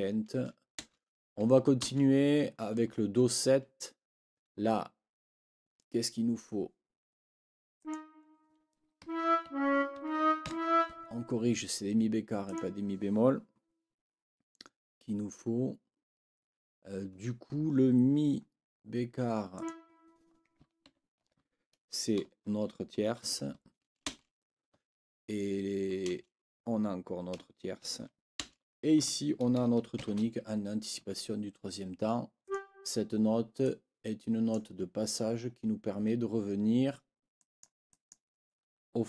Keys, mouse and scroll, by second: 0.8 space, 1.8 space, 7.8 click, 9.0 Up, 9.4 Right, 10.4 Up, 12.4 click, 12.7-17.1 scroll up 2, 19.5 click, 20.8 ctrl+l, 24.1 space, 26.1 space, 28.4 space, 30.0 shift+t, 31.0 Escape, 32.4 click, 33.6-34.7 drag, 37.4 click, 37.9 click.